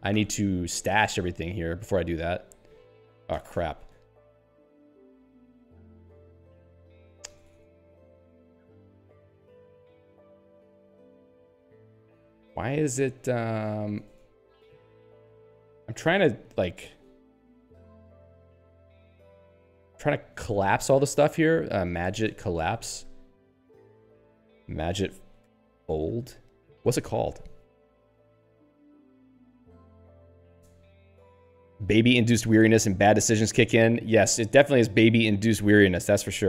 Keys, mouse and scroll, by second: 0.0-0.6 typing, 1.4 Return, 3.3 ctrl+g, 4.3 p, 6.1 n, 7.6 shift+Tab, 9.2-11.7 typing, 9.8 Tab, 10.4 Tab, 11.0 Tab, 11.5 Tab, 12.8 k, 13.8 ctrl+g, 14.2 shift+Tab, 15.0 shift+Tab, 16.8 Tab, 18.8 shift+Tab, 19.3 shift+Tab, 20.2 n, 20.4 Tab, 20.8 n, 21.0 Tab, 21.5 alt+x, 21.9-23.4 typing, 23.6 ctrl+g, 24.5 alt+x, 24.6-26.7 typing, 35.2 n, 35.5 Tab.